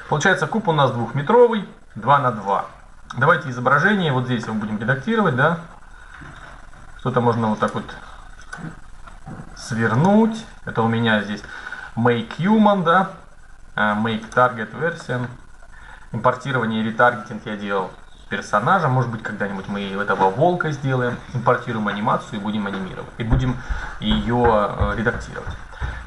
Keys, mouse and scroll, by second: 0.8-3.4 middle drag, 7.3-11.5 drag, 13.9-15.8 drag, 14.7 middle click, 16.7 middle click.